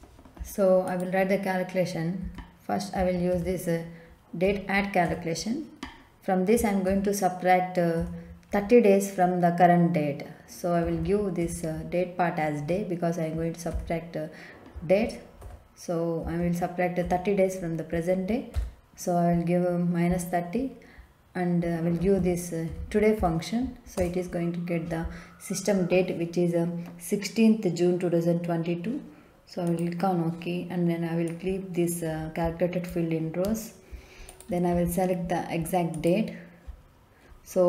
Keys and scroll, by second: 2.2 d, 2.9 a, 3.3 t, 4.4 Down, 5.0 Return, 6.8 Up, 8.5 Left, 10.8 d, 11.0 a, 11.4 y, 13.6 Right, 13.7 ,, 15.4 -, 16.2 3, 17.0 0, 18.5 ,, 22.0-23.1 typing, 23.9 Return.